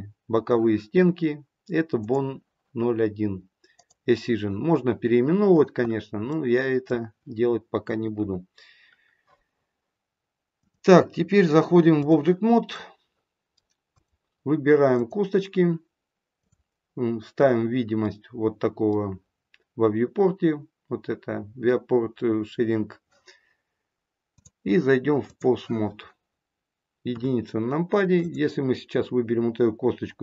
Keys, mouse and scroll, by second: 2.0 click, 3.6 click, 6.2 middle click, 8.1 KP_1, 10.6 click, 12.7 middle click, 13.9 click, 14.8 click, 18.0 middle click, 24.2 click, 27.1 KP_1, 28.2 click, 28.6 scroll down 1, 30.0-30.2 scroll down 1.